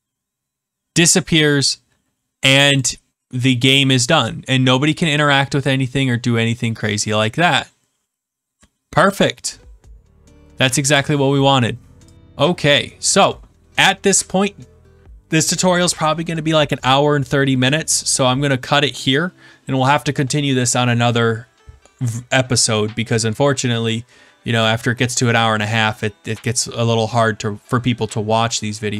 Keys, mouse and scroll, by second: 2.7 click, 5.0 click, 5.3 click, 5.6 click, 12.1 click.